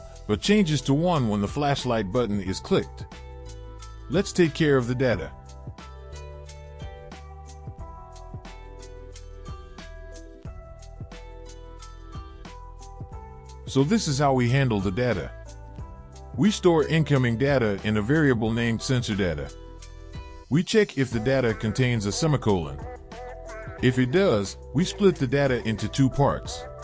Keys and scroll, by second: 5.9 Return, 7.3 BackSpace, 7.5 BackSpace, 8.1 BackSpace, 8.6 ctrl+v, 10.3 Return, 10.7 BackSpace, 11.2 BackSpace, 11.9 BackSpace.